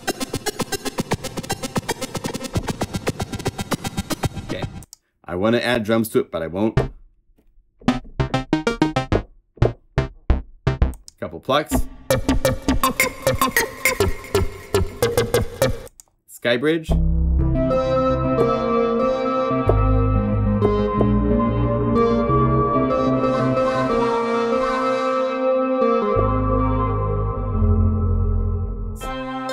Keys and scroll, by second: 28.2 F2.